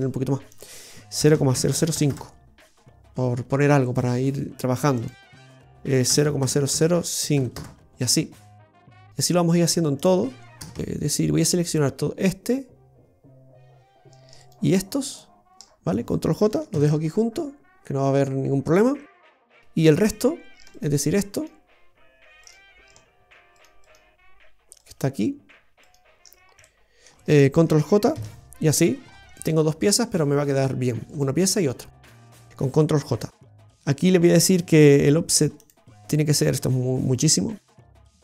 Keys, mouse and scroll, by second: 0.4 click, 1.7 KP_0, 3.8 right click, 4.9 click, 6.7 KP_0, 8.9 right click, 9.9 click, 11.3 right click, 14.4 shift+right click, 15.6 shift+right click, 16.7 ctrl+j, 18.1-18.6 scroll down 1, 18.6-19.1 scroll up 2, 19.0 middle click, 19.8 right click, 20.7 shift+right click, 22.5 shift+right click, 26.3-26.9 scroll down 2, 26.6 middle click, 28.1 ctrl+j, 29.0-29.5 scroll up 2, 29.3 middle click, 31.1 right click, 31.5 right click, 32.3 right click, 35.5 click, 37.8 click.